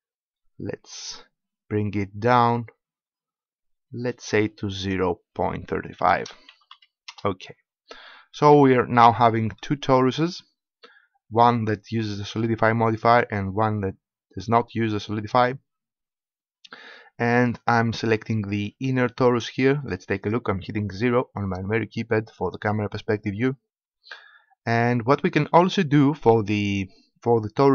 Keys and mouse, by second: 4.7-6.6 drag, 8.9 middle click, 9.3-10.4 middle drag, 18.4-21.3 middle drag, 21.3 KP_0.